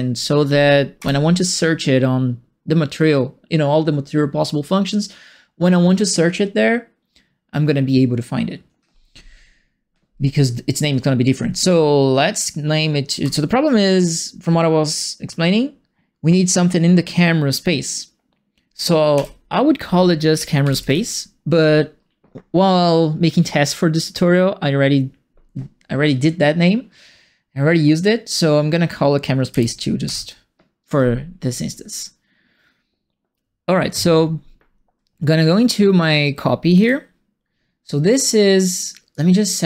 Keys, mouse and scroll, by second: 0.9 End, 13.2 Home, 19.1 End, 20.1-21.3 typing, 29.5 KP_2, 30.0 KP_Enter, 36.6 click, 36.8 click, 39.1 click.